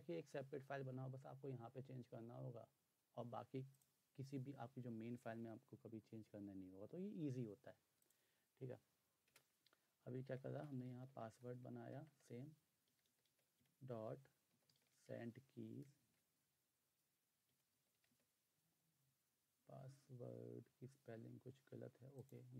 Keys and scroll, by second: 9.2 Return, 10.3-15.9 typing, 17.2-18.5 typing.